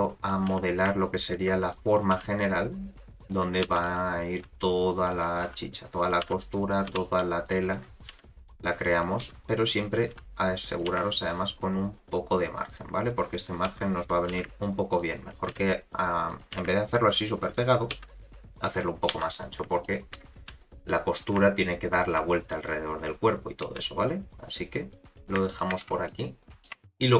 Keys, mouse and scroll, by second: 0.5 g, 1.7 click, 2.1 g, 3.6 2, 3.8 click, 4.4 e, 5.4 r, 6.2 g, 6.9 s, 8.1 g, 9.2 s, 10.1 r, 10.9 g, 13.7 s, 14.3 g, 15.5 s, 16.5 g, 17.9 s, 19.1 2, 19.3 click, 19.8 shift+middle click, 20.4 e, 23.6 e, 26.0 middle click, 26.7 Tab, 26.8 middle click.